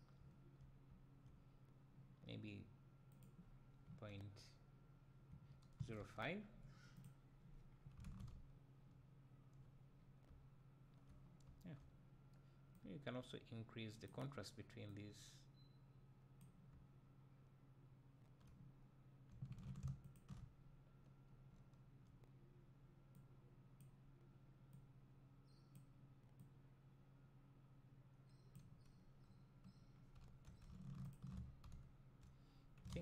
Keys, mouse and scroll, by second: 0.3 `, 7.0 click, 7.7-8.3 middle drag, 7.7-8.3 scroll down 2, 8.3 `, 10.0-10.4 scroll up 2, 12.8-17.1 drag, 16.7 `, 18.4-20.1 drag, 21.6 `, 23.1-31.1 drag, 31.8 `.